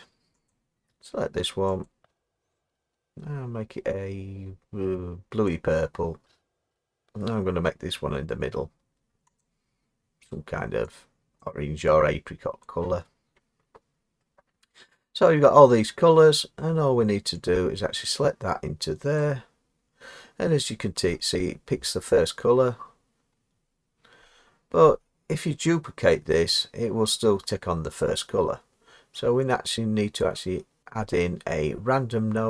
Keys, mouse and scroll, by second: 19.2-23.4 drag, 23.4-28.6 middle drag, 23.4-24.2 scroll, 30.2-30.8 drag.